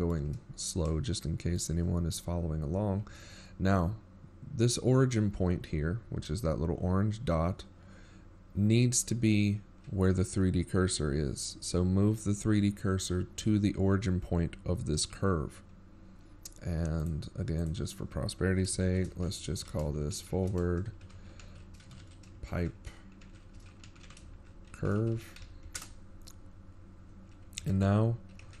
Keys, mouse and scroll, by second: 3.1 middle click, 4.3 shift+middle click, 5.1 shift+scroll down 1, 5.6 shift+middle click, 5.6-6.1 shift+scroll down 4, 6.5-6.9 scroll up 6, 7.1-7.7 shift+scroll down 2, 7.5 shift+middle click, 11.3-11.9 scroll up 7, 13.8-14.5 scroll down 6, 14.5-17.0 scroll down 1, 23.2 click, 23.8 click, 28.3 BackSpace.